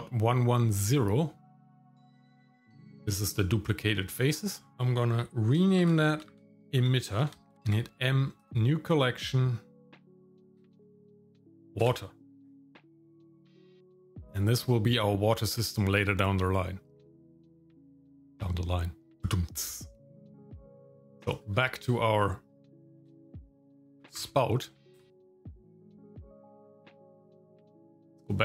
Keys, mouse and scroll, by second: 2.5 g, 4.7 F2, 6.8 t, 7.6 m, 20.7 click, 21.1 scroll down 1, 21.3 shift+middle click, 23.0 F2, 26.5 Tab, 27.8 shift+middle click, 28.3-28.4 scroll up 1.